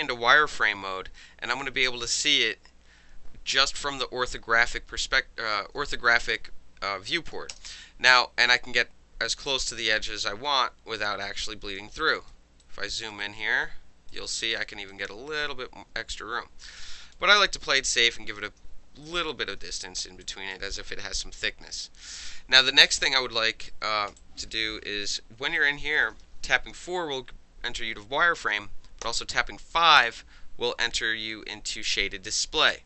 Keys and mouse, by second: 0.0 click, 5.9 click, 7.3-9.3 middle drag, 7.5 space, 9.3 click, 11.8 middle drag, 12.0-12.3 alt+right drag, 12.6-13.1 alt+right drag, 13.2-14.1 alt+right drag, 14.9-17.1 drag, 17.1-18.1 alt+middle drag, 18.1 alt+right drag, 18.4-19.0 alt+middle drag, 19.0 alt+right drag, 19.2-20.2 alt+middle drag, 20.2 alt+drag, 20.5 alt+middle drag, 20.8-21.1 alt+drag, 21.1 alt+middle drag, 21.4-21.8 alt+drag, 21.8-22.6 alt+middle drag, 22.7-24.2 alt+middle drag, 24.2 alt+drag, 24.4-25.6 alt+middle drag, 25.6-26.0 alt+right drag, 26.0 alt+middle click, 26.7 4, 29.0 5.